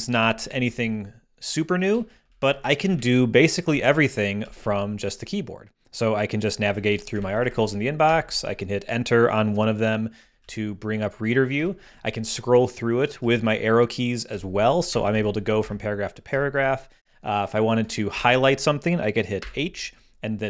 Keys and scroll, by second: 0.2 Down, 2.1 Down, 2.4 Up, 4.4 Down, 6.5 Down, 7.1 Up, 8.0 Return, 10.2 Down, 11.5 Down, 13.2 Down, 14.9 Up, 15.5 Up, 16.3 Down, 18.1 Down, 19.4 h.